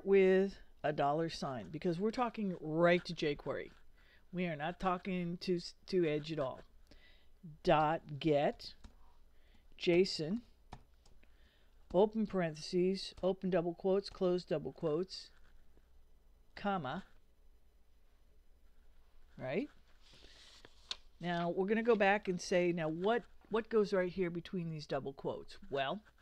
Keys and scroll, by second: 1.3 shift+4, 7.8-11.9 typing, 13.2 shift+', 16.6 ,.